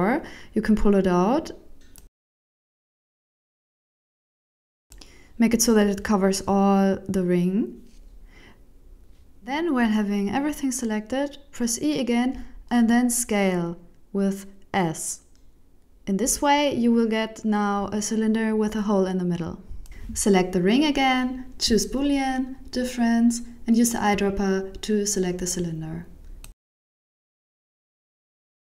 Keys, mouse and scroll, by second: 0.1 e, 3.4 alt+right click, 3.9 g, 4.7 middle click, 9.5 alt+Tab, 9.7 alt+right click, 10.4 alt+shift+right click, 11.3 e, 12.1 middle click, 12.1 g, 12.4 KP_1, 13.6 s, 16.0 middle click, 16.7 Tab, 16.9 middle click, 19.5 right click, 20.6 click, 22.3 click, 23.1 click, 24.5 click, 25.6 middle click, 26.9 click, 27.5 right click, 28.0 x.